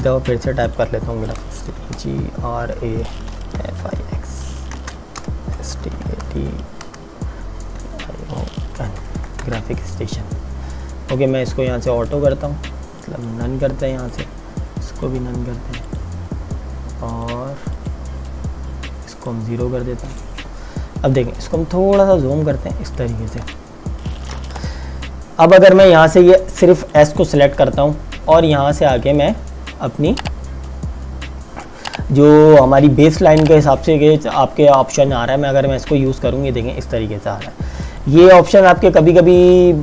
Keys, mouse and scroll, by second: 0.0 t, 0.7 click, 1.6-8.8 typing, 9.2 ctrl+Return, 12.0 click, 21.5 z, 22.0 click, 24.0 space, 24.6 t, 25.9 click, 37.8 click, 38.5 KP_Enter, 39.6 click, 39.6 space.